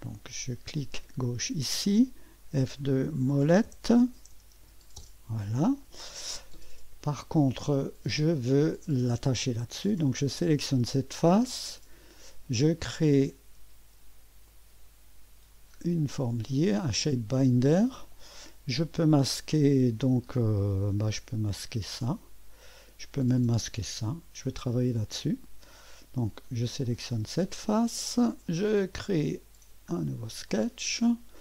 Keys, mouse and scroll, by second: 1.2 click, 2.4 F2, 3.0-5.1 typing, 6.1 scroll, 7.4 typing, 10.2 click, 12.9 click, 14.5 click, 15.8-19.0 scroll down 2, 19.2 click, 21.3 click, 22.1 click, 22.1 space, 23.5 click, 24.0 typing, 26.8 click, 29.0 click, 29.9-30.5 scroll up 1, 30.5 right click.